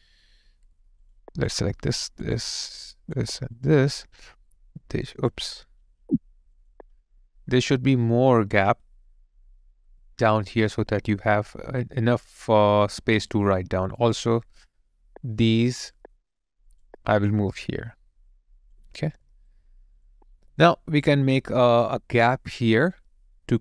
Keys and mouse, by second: 1.5 double click, 2.2 shift+click, 5.6 shift+click, 5.9 ctrl+z, 6.6 shift+click, 14.9 shift+click, 15.2 shift+click, 19.1 alt+right click, 20.4 alt+click.